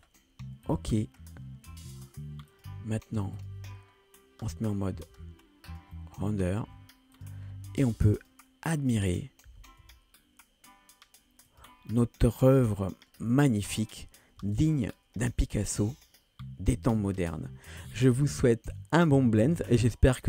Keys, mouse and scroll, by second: 0.7 click, 1.0-1.4 middle drag, 1.8 g, 3.7 click, 3.9 scroll up 2, 4.5-5.0 middle drag, 5.2 g, 6.0-6.5 middle drag, 6.7 g, 7.5 scroll up 1, 8.0 g, 8.8 click, 9.5 g, 12.5 scroll down 2, 13.0 middle click, 13.9 click, 14.9 ctrl+space, 15.1 scroll up 2, 16.1 middle click, 19.9 shift+middle click.